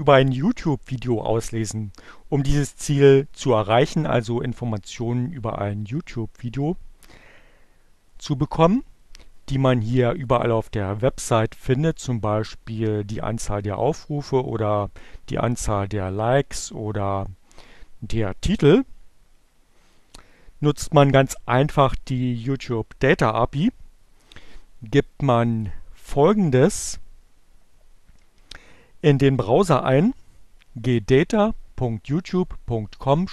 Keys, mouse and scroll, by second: 10.2 click, 25.7 click.